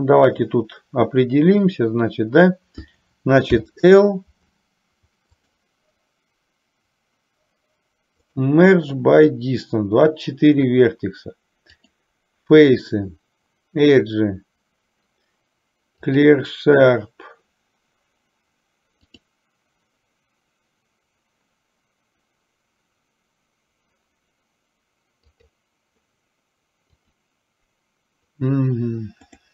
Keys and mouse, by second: 5.4-8.8 drag, 11.9-16.4 drag, 19.3-27.3 drag, 29.4-29.5 drag.